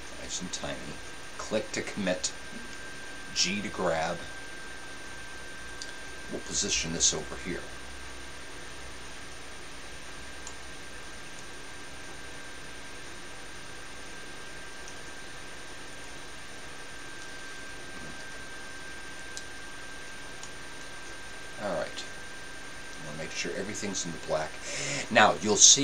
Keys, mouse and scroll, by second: 3.4 g, 18.2 a.